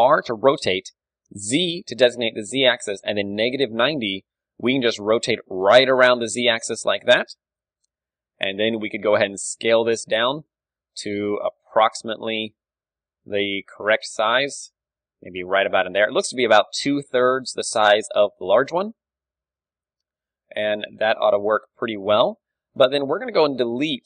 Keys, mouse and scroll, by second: 4.2 z, 5.6-10.4 middle drag, 7.8 ,, 8.9 s, 10.5-12.3 drag, 10.5 KP_1, 12.3-15.2 middle drag, 13.9 s, 18.7 middle click, 19.6 Tab, 21.2 Tab, 22.5 a, 23.1-24.0 drag, 23.7 z.